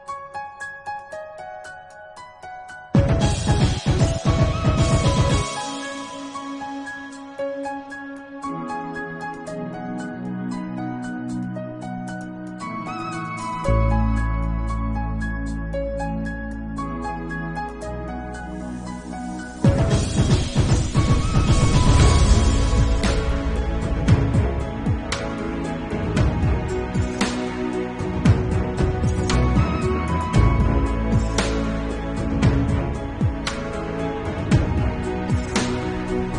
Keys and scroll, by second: 1.6 BackSpace, 1.7 8, 1.9 Return, 2.6 Left, 4.0 Right, 6.3 b, 7.2 9, 9.3 7, 9.8 ctrl+alt+z, 15.3 [, 16.2 ], 17.2 ctrl+z, 17.4 3, 28.3 ctrl+s, 32.6 ctrl+s, 34.1 ctrl+s, 35.1 ctrl+s, 35.5 ctrl+0.